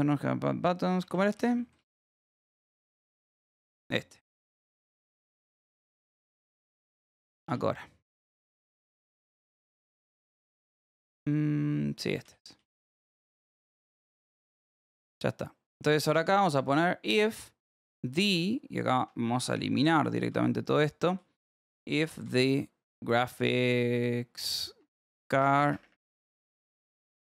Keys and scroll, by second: 1.0-4.5 typing, 6.4 y, 7.0 k, 7.6 k, 8.9 1, 9.3 k, 10.0 j, 10.4 k, 11.8-12.7 typing, 14.2 p, 14.8 j, 15.7 h, 17.9-23.0 typing, 24.7 Return, 25.4 BackSpace, 27.0-27.2 typing.